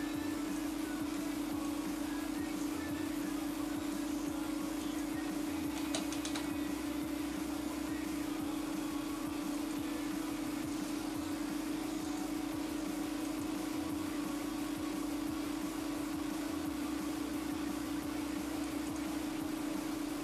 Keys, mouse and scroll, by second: 0.7 click, 4.1 click, 9.8 click, 12.2 click, 14.7 middle click, 18.8 click.